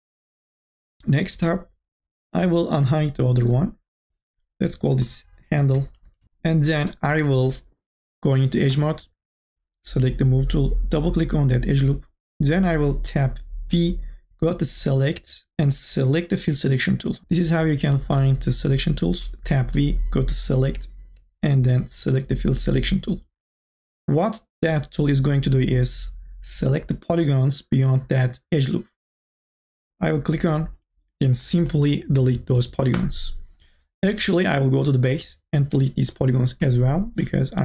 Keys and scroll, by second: 5.1-6.7 typing, 13.6 v, 33.1 Delete, 35.1 Delete, 36.6 Delete.